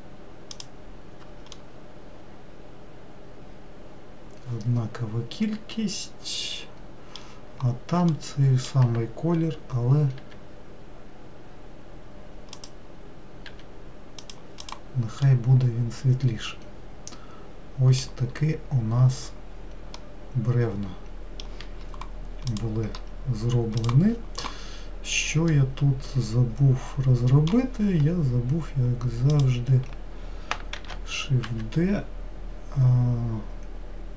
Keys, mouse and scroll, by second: 2.1-5.1 middle drag, 10.8 g, 14.1 g, 15.2 click, 15.8-19.6 middle drag, 19.6-20.5 scroll down 1, 20.5 scroll down 1, 20.6-28.5 middle drag, 28.5 scroll up 1, 29.9 click, 31.3 shift+d.